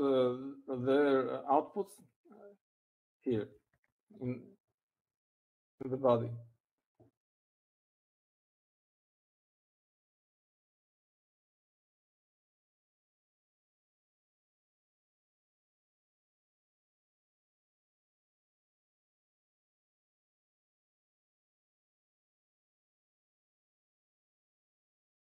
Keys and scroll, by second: 0.0 Down, 0.1 Down, 0.6 Down, 1.0 Down, 2.6 Down, 3.8 Down, 14.8-15.6 typing, 16.1 Right, 16.6 Right, 17.0 Right, 17.1 Right, 17.6 Right, 17.8 Right, 18.8 Right, 19.6-21.5 typing, 23.7-24.5 typing, 24.6 Left.